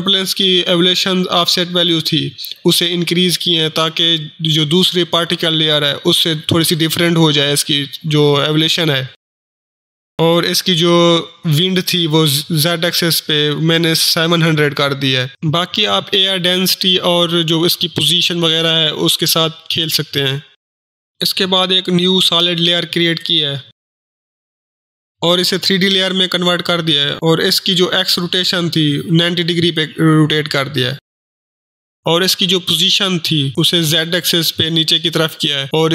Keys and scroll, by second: 3.0-3.9 typing, 11.9-12.3 typing, 17.5-17.9 typing, 23.8-24.9 typing, 30.8-31.9 typing, 32.0 ctrl+shift+h.